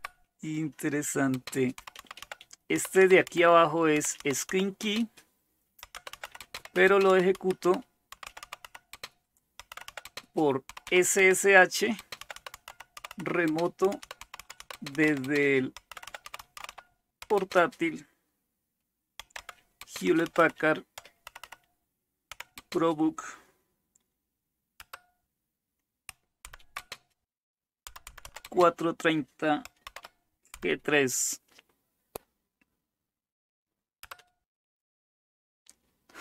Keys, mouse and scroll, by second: 0.0 typing, 1.5-17.4 typing, 19.0-22.6 typing, 24.9 Return, 26.4 #, 26.8 space, 27.8-30.6 typing, 34.0 Return.